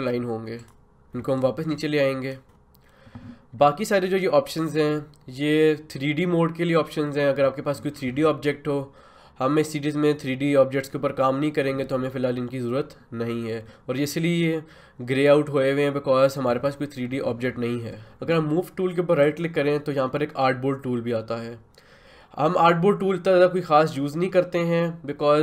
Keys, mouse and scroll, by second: 0.6 click, 1.1 ctrl+z, 1.4-11.3 drag, 17.8 click, 19.2 right click.